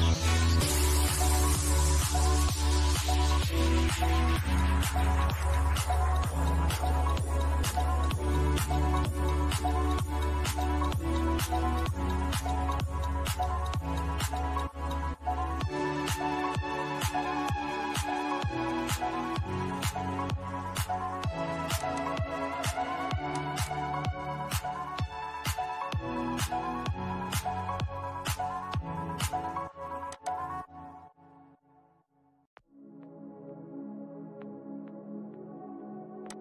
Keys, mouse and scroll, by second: 2.0 scroll up 1, 3.8-6.9 drag, 7.4 scroll down 1, 9.7 click, 10.5-10.8 scroll down 1, 10.8 shift+middle click, 12.4-14.6 shift+middle drag, 14.6 scroll down 1, 15.6-16.6 shift+middle drag, 16.6 scroll, 16.8-18.6 middle drag, 18.6 shift+middle click, 19.1-19.4 shift+scroll up 1, 21.1 click, 24.1-24.5 scroll down 1, 29.4 click, 30.8 scroll down 1, 31.8 middle click, 35.5 click.